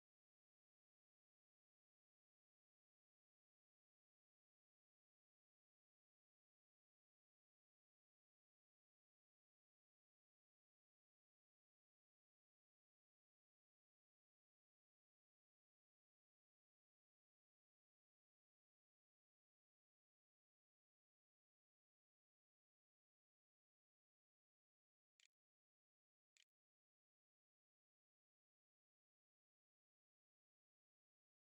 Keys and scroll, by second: 22.2-23.6 typing, 24.7-26.8 typing.